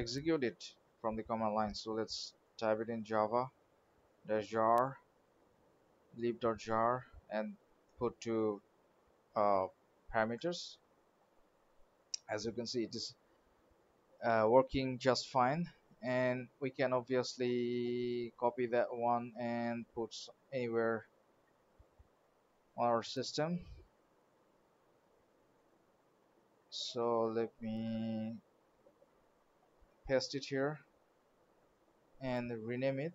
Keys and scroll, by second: 19.2 alt+Tab, 20.8 alt+Down.